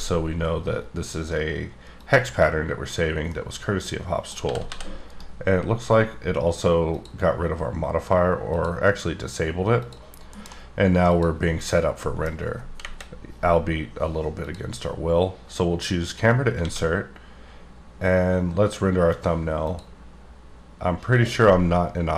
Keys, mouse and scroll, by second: 1.9 click, 3.3 middle click, 4.4 g, 4.7 z, 5.1 right click, 6.8 click, 8.4 click, 9.7 click, 10.3 alt+m, 11.1 click, 12.0 middle click, 12.8 KP_0, 14.4 click, 16.6 a, 19.6 click, 21.1 click.